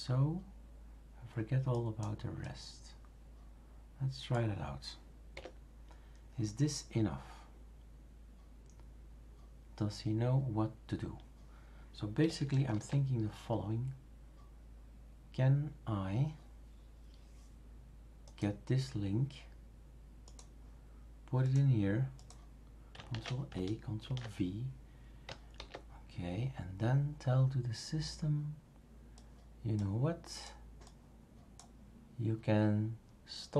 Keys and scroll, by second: 5.3 Delete, 12.7 super+f, 23.1 ctrl+a, 24.0 ctrl+v, 25.6 super+f.